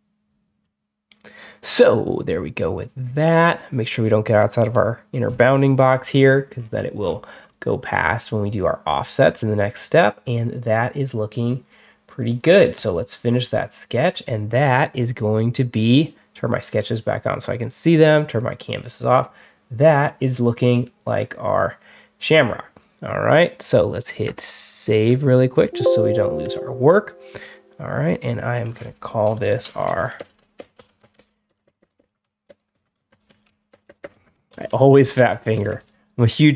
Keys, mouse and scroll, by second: 0.5 click, 6.0 scroll down 1, 6.4 middle drag, 6.9 scroll up 1, 7.3 scroll down 1, 9.7 click, 12.6 click, 15.3 click, 24.1 click, 24.9 click, 25.5 click, 26.3 click, 27.2 right click, 27.8 click, 29.5-36.5 typing, 29.7 Caps_Lock, 32.6 Caps_Lock.